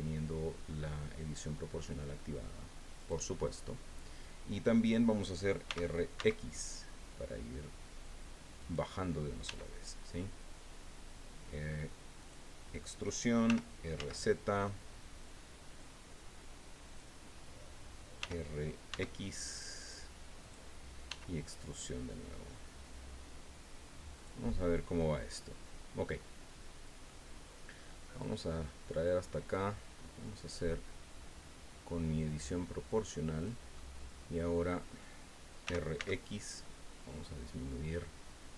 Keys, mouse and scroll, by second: 0.4-0.7 scroll up 2, 0.9 scroll up 2, 3.0 click, 5.6 r, 6.1 x, 8.6 click, 9.4 e, 12.2 click, 13.4 r, 13.9 z, 16.8 click, 18.2 r, 18.9 x, 20.4 click, 21.1 e, 24.1 click, 24.4-27.2 middle drag, 28.2-29.6 drag, 29.6-29.9 scroll down 1, 30.4-31.0 scroll down 2, 33.7-34.9 drag, 35.6 r, 35.9 x, 36.5 scroll up 2.